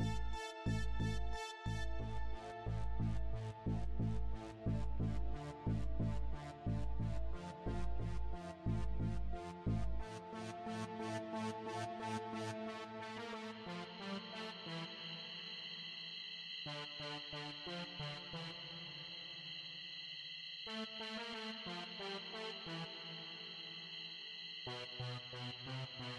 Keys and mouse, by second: 1.3 a, 1.8 right click, 2.6 click, 3.7 click, 4.8 KP_7, 5.7-6.1 KP_Subtract, 7.1 click, 8.2 click, 9.5 right click, 10.2 click, 11.0-13.2 drag, 13.8 right click, 14.3 click, 15.1 click, 16.6 KP_0, 19.2 click, 20.5 click, 21.6 click, 23.4 click, 24.4 click, 25.5 click.